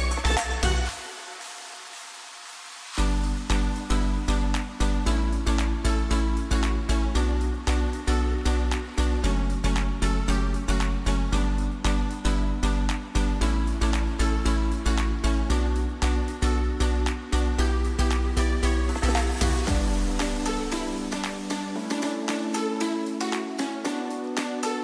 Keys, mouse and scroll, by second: 0.7 alt+scroll down 1, 1.2 alt+scroll up 1, 1.9 scroll down 1, 2.2-2.9 alt+scroll up 1, 3.6 t, 4.2 click, 9.1-10.8 typing, 12.2 click, 14.9 click, 20.2-21.7 drag, 22.7 v, 23.2-24.8 drag.